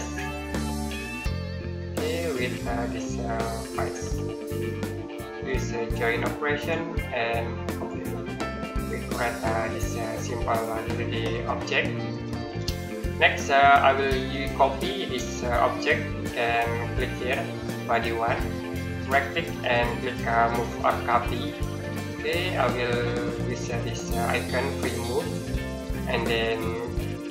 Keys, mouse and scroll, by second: 1.2 scroll down 1, 1.5-2.0 scroll up 1, 2.0 middle click, 3.8 click, 8.2 scroll down 1, 8.4-9.6 scroll up 1, 9.6 middle click, 10.5-11.4 scroll up 1, 11.4-11.9 scroll down 1, 11.9 middle click, 12.6 middle click, 16.6 click, 18.7 right click, 21.0 click, 21.9 middle click, 25.0 click.